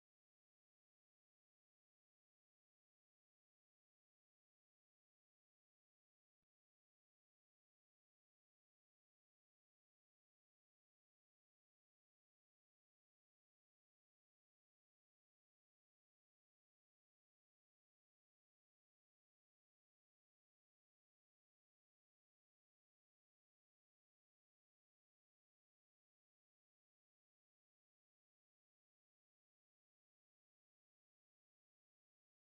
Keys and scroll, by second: 0.6 9, 0.8 7, 1.0 Return, 2.8 1, 3.0 0, 3.1 3, 3.3 Return, 5.3 alt+x, 11.9 9, 13.9 1, 14.1 0, 14.3 1, 14.5 Return, 15.4 alt+x, 16.7 1, 17.0 0, 17.5 1, 17.7 0, 18.4 Return, 20.3 space, 22.2 space, 22.7 ctrl+s, 29.0 n, 29.5 ctrl+s.